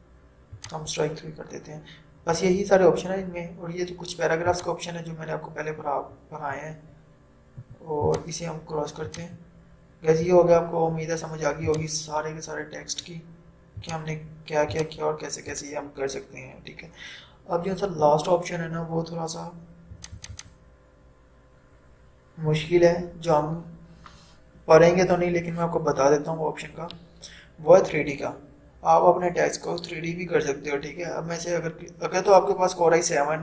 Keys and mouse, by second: 4.6 click, 4.6 typing, 8.1 click, 8.1 typing, 11.6 typing, 11.7-18.3 drag, 20.0 click, 20.0 typing.